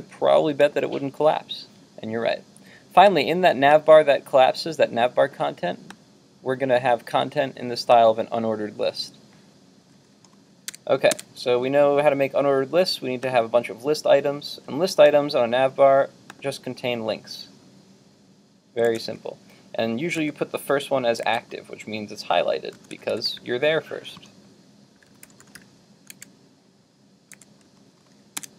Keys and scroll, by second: 11.1 super+Tab, 18.9 super+Tab, 26.2 super+Tab, 27.3 super+Tab.